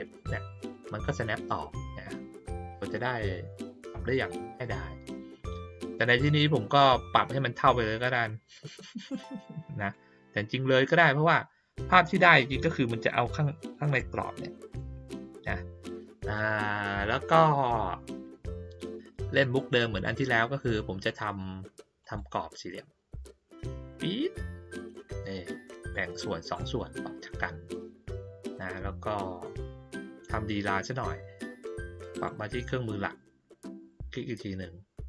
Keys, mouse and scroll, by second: 7.7 click, 9.9-12.0 drag, 13.9 click, 16.2 click, 22.0 click, 23.7-25.9 drag, 32.1 click, 33.8 click.